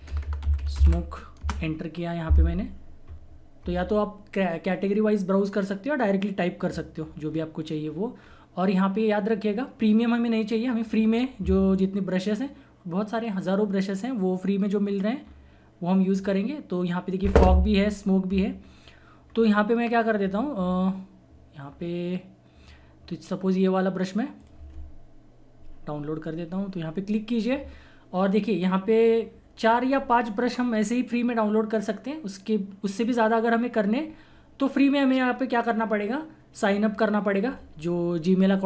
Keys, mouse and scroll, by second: 0.0-1.5 typing, 6.9 scroll down 1, 8.2 scroll up 1, 11.1 scroll down 1, 15.2 scroll down 1, 18.6 scroll down 1, 19.3 scroll up 1, 20.2 scroll down 1, 20.6 typing, 23.8 typing, 24.3 click.